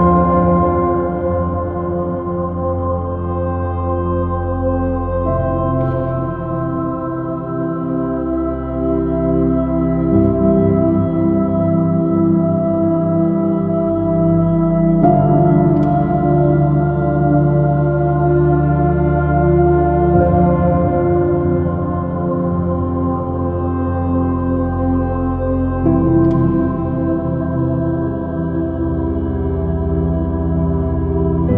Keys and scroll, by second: 13.2 j, 25.5 space.